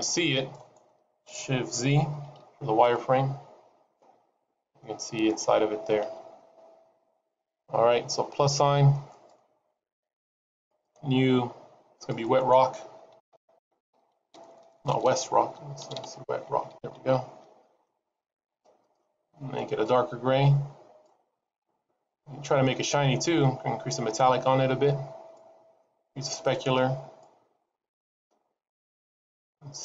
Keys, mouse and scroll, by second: 2.9 shift+z, 3.8 middle click, 5.3-6.4 scroll down 4, 6.4 shift+z, 7.0-8.4 scroll up 2, 8.4-8.9 scroll up 1, 9.0 click, 10.5 click, 11.8 click, 14.4 BackSpace, 14.9 BackSpace, 15.9 BackSpace, 18.7 click, 21.4 click, 22.3-23.3 scroll down 1, 23.3 click, 23.3-23.9 scroll down 1, 25.7 click, 27.5-28.7 scroll down 1, 28.7-29.5 scroll down 2, 29.5-29.8 scroll up 4.